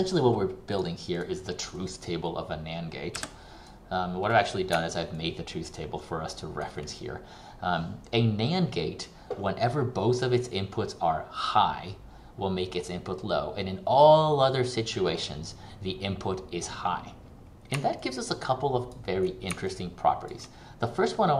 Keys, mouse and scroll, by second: 5.3 ctrl+click, 18.1 ctrl+click.